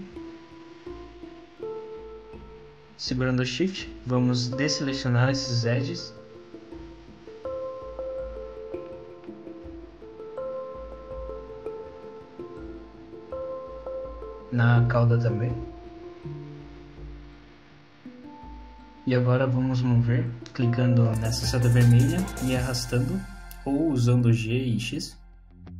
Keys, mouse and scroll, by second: 1.5 middle click, 2.7 scroll up 1, 3.4 shift+middle click, 4.1-4.5 scroll up 1, 4.9 shift+click, 5.3 shift+click, 6.0 shift+click, 7.1 shift+click, 7.6 shift+click, 7.9 shift+click, 8.1 middle click, 8.5 shift+click, 8.7 shift+click, 9.0 middle click, 9.5 shift+click, 9.8 shift+click, 10.5 shift+click, 13.0 shift+click, 13.2 middle click, 13.5 scroll down 2, 13.6 middle click, 14.2-14.6 scroll up 2, 14.9 shift+click, 15.2 shift+click, 15.8 shift+click, 15.9 shift+click, 16.4 middle click, 18.5 middle click, 21.7 click.